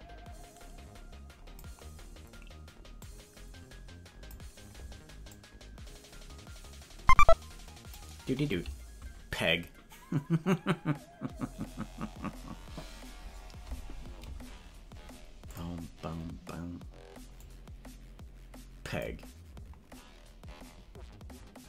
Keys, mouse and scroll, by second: 2.9-4.5 drag, 5.4-8.3 drag, 15.4 click, 17.5-19.1 drag.